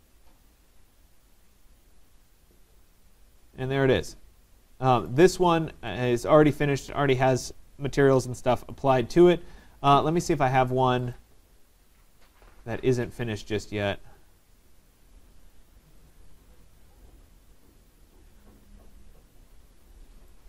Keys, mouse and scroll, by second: 1.3 click, 1.9 click, 3.3 click, 3.7 middle click, 3.7 middle click, 3.8 middle click, 5.1 right click, 5.5 middle click, 5.6 middle click, 6.5 right click, 6.8 middle click, 7.6 middle click, 7.6 middle click, 7.7 middle click, 8.8 right click, 9.1 middle click, 9.2 middle click, 11.2 click, 12.0 click, 15.0 click, 16.1 click, 17.9-18.6 scroll, 18.4 middle click, 19.5-20.1 scroll, 20.3 right click.